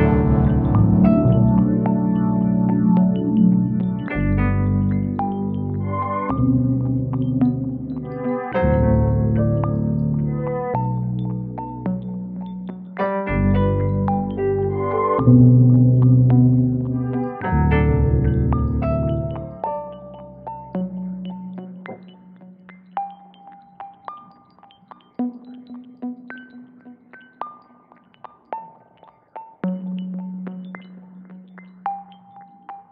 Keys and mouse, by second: 0.7 ctrl+KP_Subtract, 1.6 g, 1.9 z, 2.0 z, 4.1 click, 4.9 middle click, 5.7 click, 6.9 e, 7.3 s, 8.0 click, 9.8 e, 11.4 click, 11.6 e, 12.4 click, 13.1 click, 13.9 e, 15.2 click, 15.5 middle click, 16.7 click, 18.2 ctrl+KP_Add, 20.2 middle click, 20.9 ctrl+space, 22.4-23.2 middle drag, 23.3 g, 24.0 click, 24.8 middle click, 26.0 KP_1, 26.8 Tab, 28.6 alt+d, 29.6 click, 31.6 ctrl+m, 32.7 x.